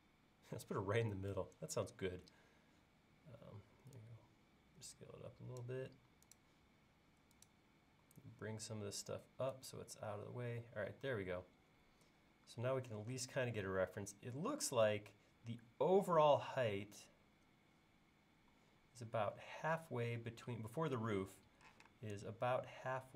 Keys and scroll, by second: 21.7 p.